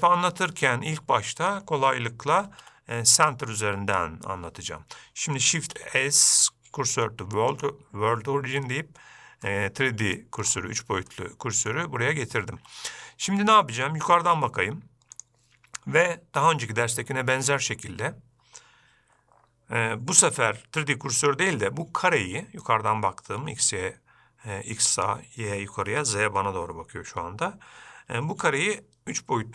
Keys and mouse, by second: 2.9 shift+a, 6.0 shift+s, 9.8-10.5 middle drag, 11.5-12.1 shift+middle drag.